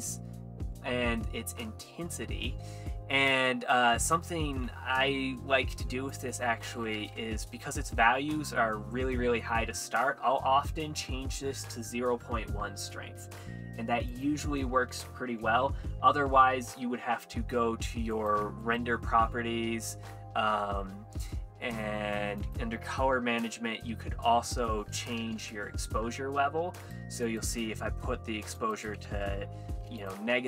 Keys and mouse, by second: 4.6 z, 8.6 middle click, 9.4 middle click, 14.1 click, 18.2 click, 18.7 click, 22.5 click, 24.5-25.5 drag, 26.9 click, 27.3 click, 28.6 click, 30.0 click.